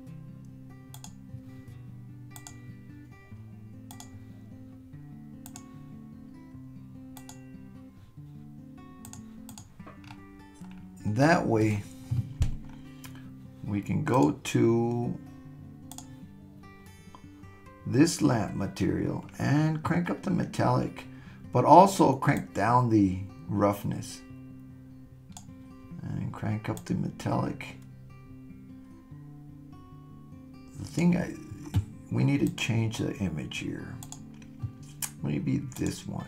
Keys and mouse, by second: 1.0 click, 2.4 click, 5.5 click, 7.2 click, 9.1 click, 15.9 drag, 22.5-25.4 drag, 26.8-31.0 drag, 32.5-36.2 drag.